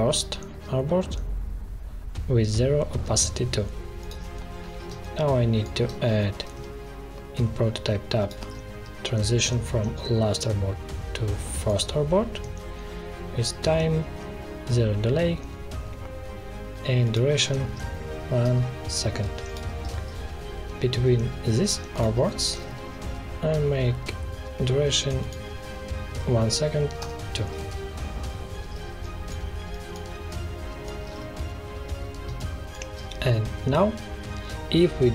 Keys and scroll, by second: 4.8 space, 6.4 alt+2, 17.6 1, 18.4 Return, 22.1 space, 26.0 1, 26.9 Return, 28.8 space, 32.2 space.